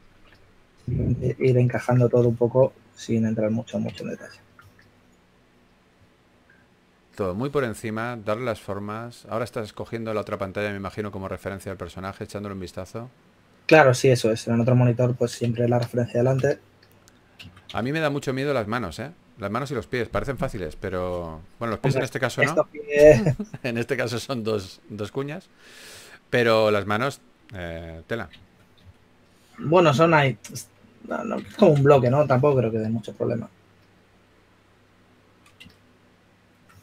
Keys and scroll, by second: 0.3 s, 1.5-2.8 typing, 5.9 3, 12.7 3, 18.1 3, 24.4 s, 30.2 3, 32.7 3.